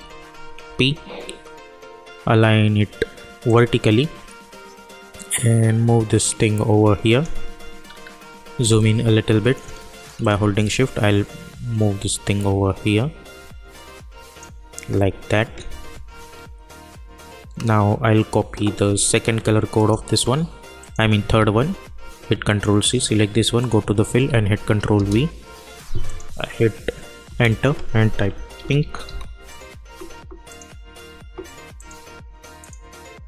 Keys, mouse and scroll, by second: 0.6 p, 3.4-7.8 drag, 7.8-8.3 alt+scroll up 1, 8.6 space, 8.8 click, 9.7 space, 10.2-17.0 drag, 19.7 click, 21.3 ctrl+c, 22.4 click, 24.2 ctrl+v, 24.9 Return, 26.0 click, 27.2 Return, 28.1-29.5 typing, 30.4 click.